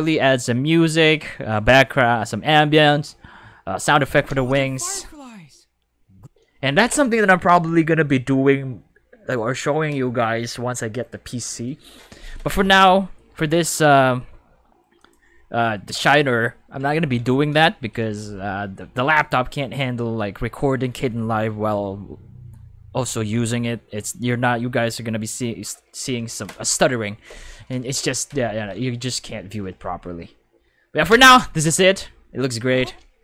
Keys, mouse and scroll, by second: 4.3 space, 6.1 space, 15.0 click, 16.9 ctrl+5, 28.5 ctrl+5, 31.1 space, 32.7 space.